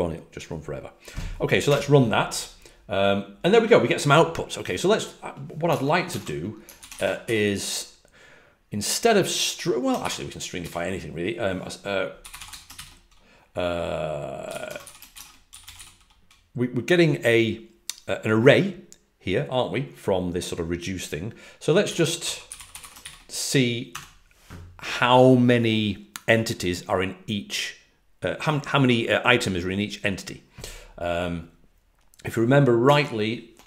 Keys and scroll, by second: 1.6 typing, 6.0 super+Tab, 12.3 typing, 14.3-16.2 typing, 21.5-23.2 typing.